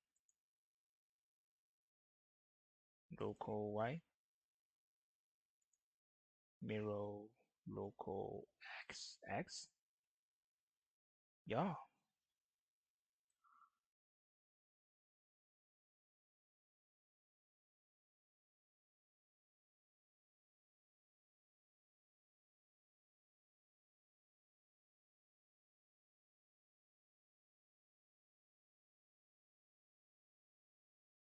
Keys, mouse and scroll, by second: 0.0 right click, 2.4 click, 3.8 typing, 3.9 ctrl+z, 5.5 right click, 8.6 right click, 8.6 typing, 8.7-22.6 drag, 23.0 typing, 26.3 click, 26.3 typing, 26.4 click, 29.1 shift+d, 30.1-31.2 drag.